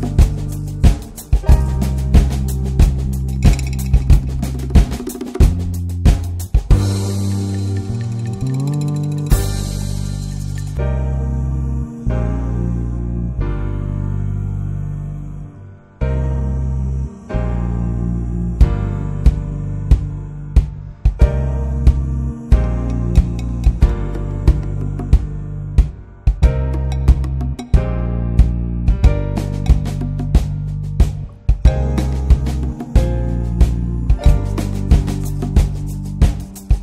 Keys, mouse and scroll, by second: 3.6-9.2 drag, 9.2-12.8 middle drag, 12.8-17.9 drag, 17.9-21.5 middle drag, 21.5-26.2 drag, 26.2 scroll down 1, 26.5-27.3 middle drag, 27.3-27.6 scroll up 1, 27.6-29.1 middle drag, 29.1-30.8 drag, 30.8-34.0 shift+middle drag, 34.0-36.8 drag.